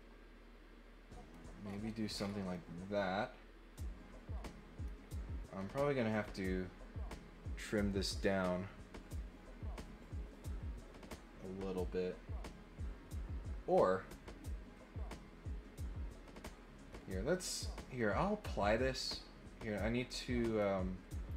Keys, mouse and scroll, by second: 1.6 scroll up 2, 1.8 scroll down 2, 2.1 scroll up 2, 2.5-4.8 middle drag, 20.0 click.